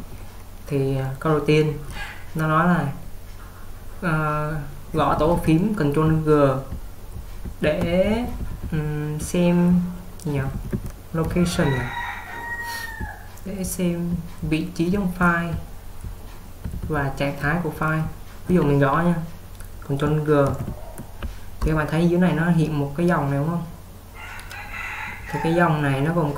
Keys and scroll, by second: 0.9 typing, 4.8-11.7 typing, 13.0-18.7 typing, 20.3-21.0 typing.